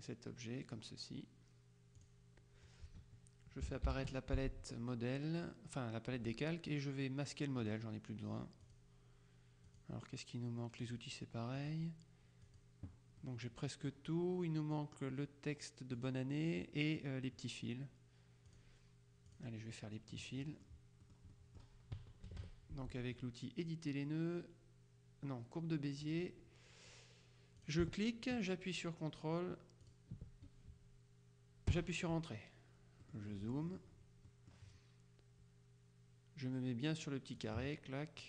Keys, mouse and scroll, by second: 2.1 click, 4.0 ctrl+shift+l, 7.7 click, 8.7 click, 9.8 click, 10.9 click, 11.6 click, 12.5 click, 13.3-14.4 middle drag, 16.0 click, 18.6 click, 19.4 click, 19.8 middle click, 20.4 middle click, 21.1-22.2 middle drag, 22.3 KP_Subtract, 26.1 click, 27.7 ctrl+click, 30.0 ctrl+click, 31.8 KP_Enter, 33.2-35.1 middle drag, 37.5 click.